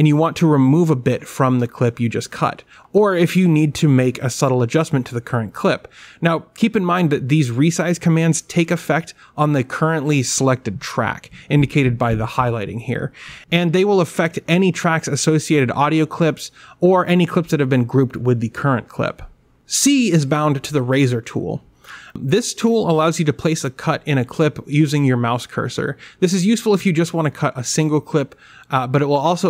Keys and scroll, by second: 1.7 w, 7.5 x, 9.9 q, 17.7 w, 20.6 c.